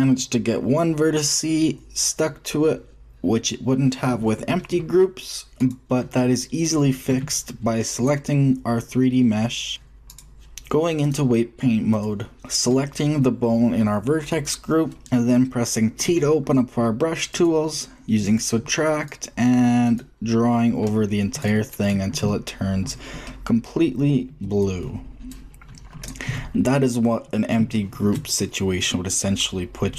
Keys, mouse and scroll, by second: 6.6-7.9 middle drag, 7.0 Tab, 7.9-9.2 drag, 9.2 middle click, 9.4-11.0 drag, 12.0 click, 13.3 middle click, 14.2 click, 15.0 t, 16.0 t, 23.0 click, 23.2-25.2 middle drag, 25.2-26.0 drag, 26.2 click, 26.2 t, 26.7-27.5 middle drag.